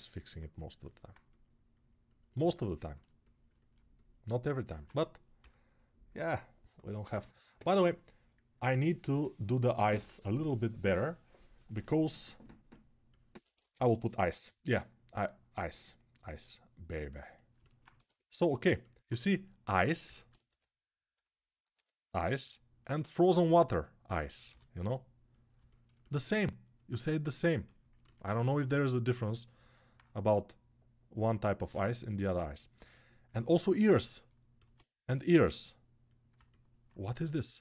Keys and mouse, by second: 4.5 1, 5.2-5.9 [, 13.3 ctrl+Tab, 13.6 shift+a, 16.3-19.7 right drag, 17.7 Tab, 19.0 s, 19.7-26.5 alt+middle drag, 20.2 g, 21.5 s, 24.2 g, 26.5-32.5 right drag, 31.4 g, 32.5-37.2 alt+middle drag, 34.8 g, 37.2-37.6 right drag.